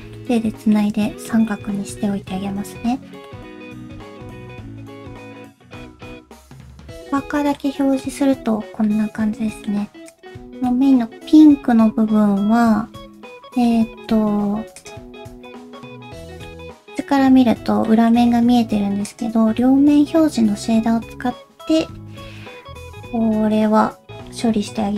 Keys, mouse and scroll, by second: 0.2 middle click, 0.9 scroll down 1, 1.1 shift+middle click, 1.3 shift+click, 1.5 middle click, 2.6 Tab, 2.9 scroll down 1, 3.3 middle click, 3.4 middle click, 3.4 /, 3.4 q, 3.7 middle click, 8.0 middle click, 10.1 click, 10.7 middle click, 15.2 middle click, 15.2 q, 17.0 middle click, 17.9 middle click, 18.5 q, 19.6 middle click.